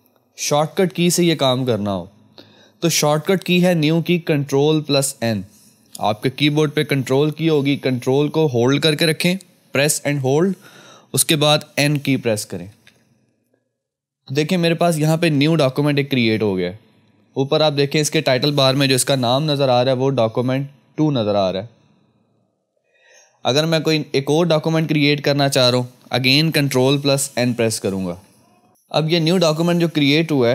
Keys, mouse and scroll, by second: 10.9 ctrl+Num_Lock, 12.7 ctrl+n, 19.2 F2, 20.4 click, 22.7 F1, 24.6 click, 28.0 ctrl+n, 29.0 F2.